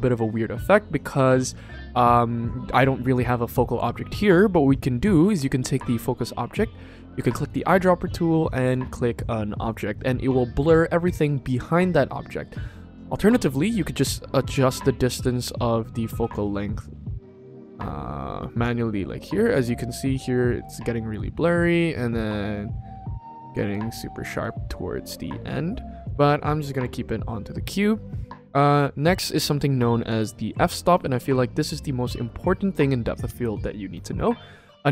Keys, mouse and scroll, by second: 7.3 click, 12.9 click, 13.8-23.4 drag, 25.9 click.